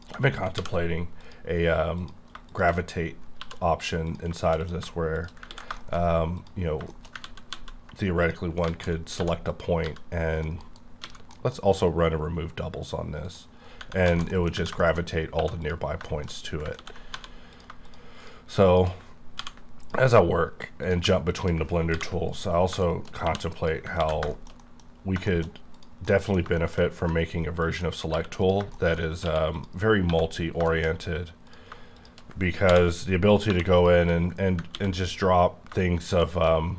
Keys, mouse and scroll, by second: 0.5 m, 1.2 click, 2.0 click, 3.2 scroll down 4, 3.4 2, 4.0 click, 4.6 click, 5.1 shift+click, 5.6 x, 5.7 middle click, 5.8 scroll down 1, 6.0 scroll up 2, 6.3 click, 6.6 scroll down 2, 6.9 shift+middle click, 6.9 shift+scroll up 1, 7.2 ctrl+z, 7.5 ctrl+z, 8.2 click, 8.6 alt+z, 9.1 1, 9.5 click, 9.8 g, 10.3 right click, 10.6 KP_Decimal, 11.0 a, 11.3 middle click, 11.7 right click, 13.2 click, 13.7 scroll up 2, 14.1 alt+z, 14.3 middle click, 14.5 scroll down 1, 14.5 Tab, 14.8 shift+middle click, 15.0 shift+scroll up 2, 15.3 2, 15.6 click, 16.1 shift+middle click, 16.4 scroll up 2, 16.7 ctrl+x, 17.1 1, 17.5 click, 18.2 shift+click, 18.7 shift+click, 19.3 m, 19.8 click, 20.4-20.8 scroll down 3, 20.8 click, 21.3 click, 21.9 m, 22.2 click, 22.8 shift+middle click, 23.2 2, 23.5 click, 23.9 ctrl+x, 24.3 shift+middle click, 24.9 scroll down 4, 25.2 shift+middle click, 25.7 click, 26.0 middle click, 27.6 ctrl+click, 28.1 q, 28.4 click, 28.7 shift+middle click, 29.0 shift+scroll up 2, 29.2 q, 29.5 click, 30.1 1, 30.7 middle click, 30.9 scroll up 2, 31.4 click, 33.4 j, 33.7 click, 34.7 ctrl+x, 36.2 shift+middle click.